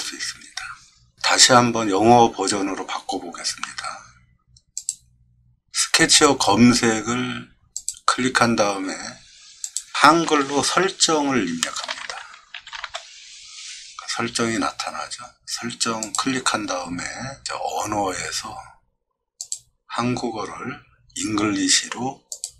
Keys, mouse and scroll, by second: 4.8 click, 7.8 click, 9.6 click, 11.5-13.3 typing, 16.0 click, 19.4 click, 22.3 click.